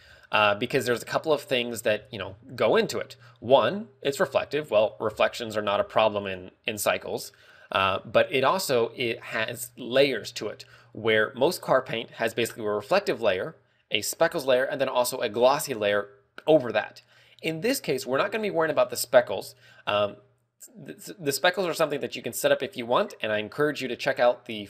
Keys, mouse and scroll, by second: 0.1 scroll down 17, 0.8 scroll up 8, 2.3-2.8 scroll up 4, 3.0 shift+middle click, 3.5 scroll up 1, 5.5 right click, 6.1 right click, 8.2 shift+middle click, 8.7 middle click, 9.5 shift+middle click.